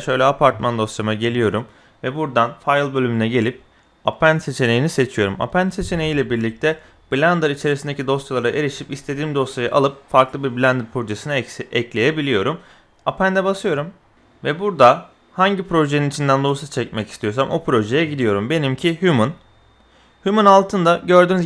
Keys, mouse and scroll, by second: 2.5-13.2 drag.